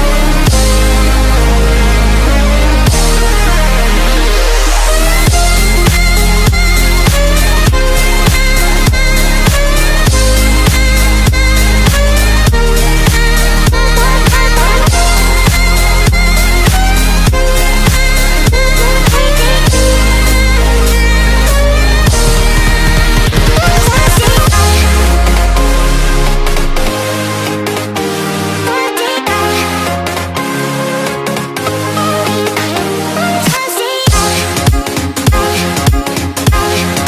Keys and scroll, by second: 35.3 v.